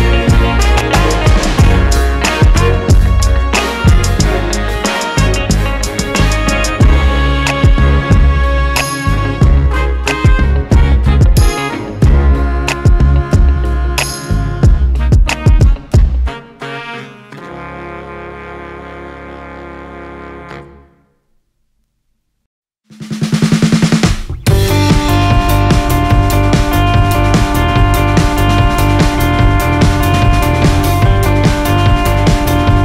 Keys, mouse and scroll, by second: 2.2 KP_0, 2.4 scroll up 1, 2.7 alt+a, 9.3-13.5 drag, 14.9-15.6 drag, 17.6 click, 17.9 scroll up 2, 18.4-18.8 scroll down 2, 18.8 alt+a, 19.0-19.8 scroll up 2, 19.8-20.3 scroll down 2, 24.2 click, 25.5 g, 27.8 click, 29.7 click, 29.7 KP_0, 31.6 scroll up 2.